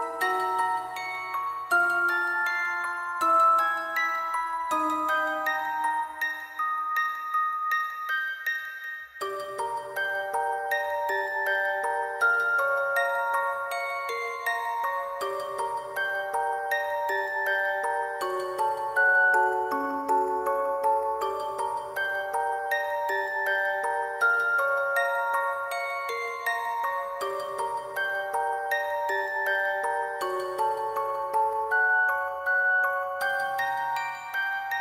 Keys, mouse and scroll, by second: 8.3 alt+click, 8.8 ctrl+z, 9.4 ctrl+z, 11.5 alt+click, 11.6 alt+click, 14.9 alt+click, 15.0 shift+click, 16.8 alt+click, 19.0 alt+click, 19.4 double click, 19.8 double click, 20.7 alt+click, 22.9 alt+click, 24.0 alt+click, 25.1 alt+click, 25.4 alt+click, 25.7 shift+click, 25.8 alt+shift+click, 26.2 alt+click, 26.3 alt+click, 27.5 [, 30.4 ctrl+click, 31.0 ctrl+click, 31.7 alt+click, 32.9 ctrl+click, 34.4 double click, 34.6 alt+click.